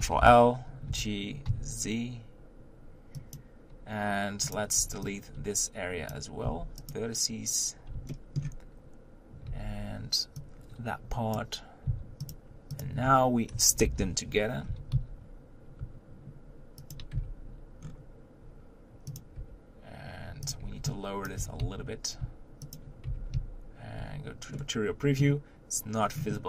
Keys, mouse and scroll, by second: 0.0 ctrl+l, 0.9 g, 4.6 click, 6.1 b, 6.9 x, 8.1-8.8 shift+middle drag, 8.8-9.3 scroll up 1, 9.7 right click, 11.3 b, 12.3 x, 12.8 click, 13.8 ctrl+l, 14.7 g, 17.2 Tab, 17.8-19.2 scroll down 4, 19.2 click, 19.4 Tab, 20.5 click, 20.6 b, 21.4 g, 23.1 Tab, 24.0 z, 24.5-26.0 middle drag, 26.0-26.3 scroll down 3, 26.3-26.4 middle drag.